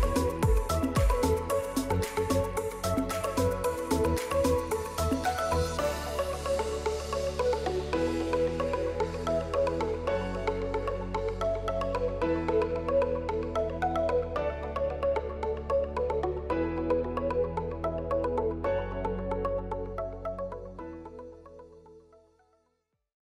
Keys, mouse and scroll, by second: 0.7 right click, 2.0 click, 3.3 click, 4.5 F11, 4.5 click, 5.4 F11, 6.8 click.